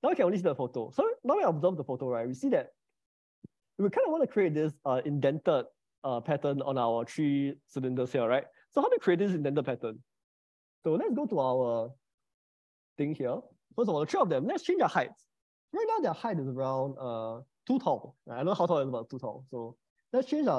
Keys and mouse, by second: 0.0 middle click, 10.5 click, 12.0 middle click, 13.3 click, 15.4 middle click, 19.3 s, 20.3 Escape.